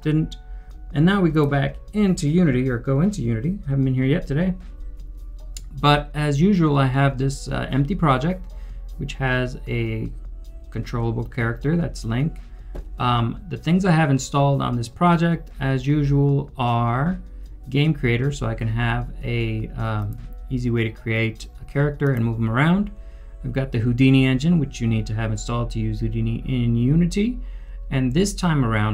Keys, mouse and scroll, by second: 8.2 scroll down 1, 9.3 scroll up 1, 10.6 scroll down 1.